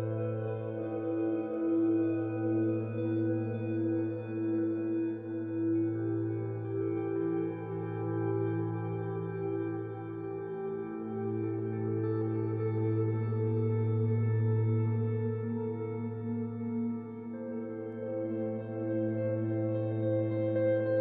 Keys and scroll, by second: 0.0 b, 9.7 z, 16.9 z, 17.2 z, 17.2 ctrl+alt+1, 18.4 b.